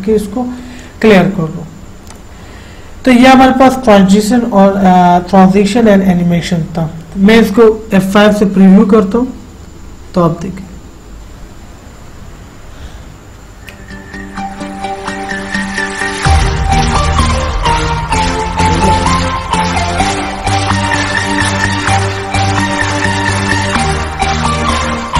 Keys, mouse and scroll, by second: 2.4 click, 10.9 F5.